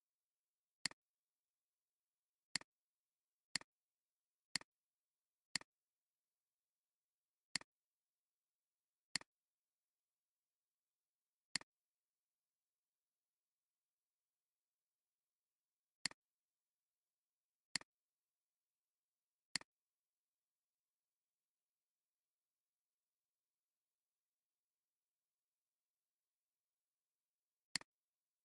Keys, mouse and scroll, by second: 0.6 space, 3.6 alt+click, 4.5 alt+space, 7.5 click, 16.0 click, 16.7 click, 19.4 click, 27.6 click.